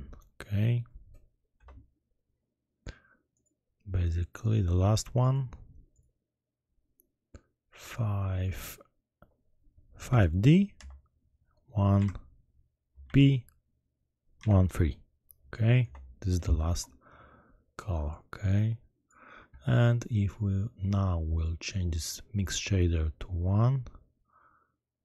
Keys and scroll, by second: 1.6 Return, 10.2 5, 10.7 d, 11.9 1, 13.0 shift+b, 14.4 1, 14.7 3, 15.8 Return.